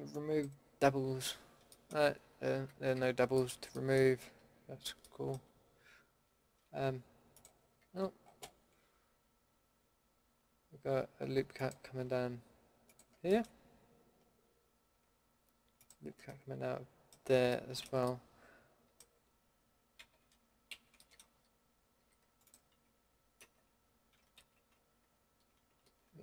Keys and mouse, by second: 2.5 a, 2.9 a, 4.2 a, 7.8 a, 13.3-16.2 middle drag, 16.2 click, 16.3-17.5 middle drag, 18.5 middle click, 19.9 ctrl+x, 20.7 ctrl+z, 22.0 a, 23.4 ctrl+x, 24.4 ctrl+z, 25.0 ctrl+c, 25.8 ctrl+x.